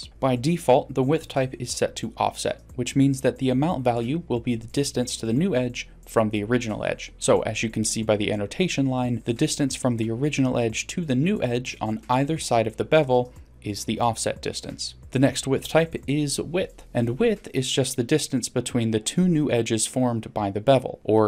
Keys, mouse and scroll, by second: 0.0-1.1 scroll up 1, 5.4 click, 16.8-17.7 drag, 21.1-21.2 drag.